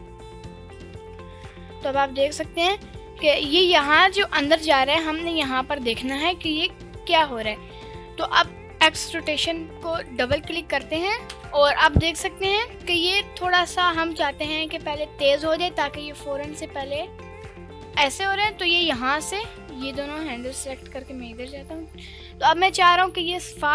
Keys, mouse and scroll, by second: 0.8-4.7 drag, 10.0 click, 10.1 click, 11.3 KP_Decimal, 12.4 scroll down 2, 12.6 scroll up 2, 14.4-19.6 drag, 20.5 shift+drag, 21.3 KP_Decimal, 23.6 click.